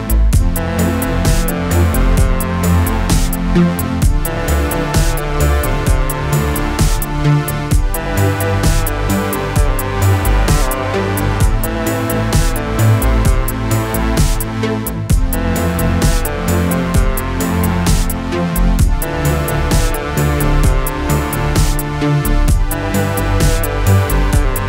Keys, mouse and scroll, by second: 0.0-0.7 typing, 2.8 click, 4.9 ctrl+n, 6.5-8.2 typing, 9.0 click, 12.1 click, 13.2-13.5 scroll up 1, 14.9 click, 21.4 click, 22.7 click, 24.1 z.